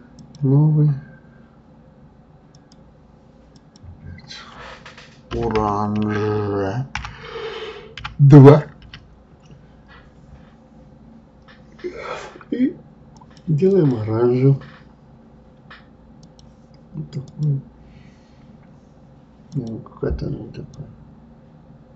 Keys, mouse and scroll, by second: 0.2 click, 2.5 click, 3.6-6.6 drag, 13.7 click, 19.5 click.